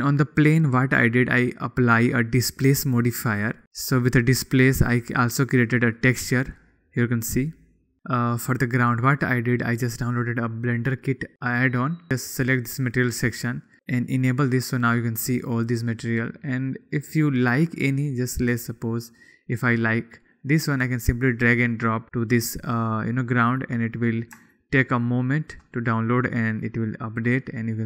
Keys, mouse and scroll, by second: 0.6-0.9 shift+drag.